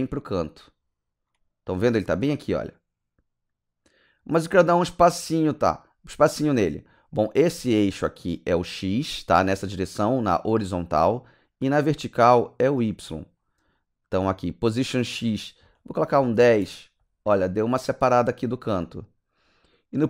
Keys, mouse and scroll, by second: 12.8 click, 15.0 click, 16.2 KP_1, 16.4 KP_0, 16.6 KP_Enter, 19.9 KP_Enter.